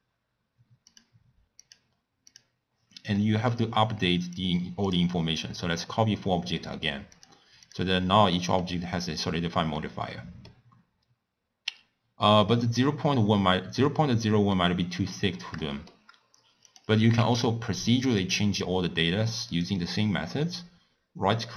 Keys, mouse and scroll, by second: 5.0 click, 7.1 click, 8.3-10.6 middle drag, 10.6-11.1 scroll up 1, 11.3 scroll up 2, 11.3-11.6 scroll down 1, 11.6-12.1 scroll up 1, 14.5-17.5 middle drag, 17.5 shift+d.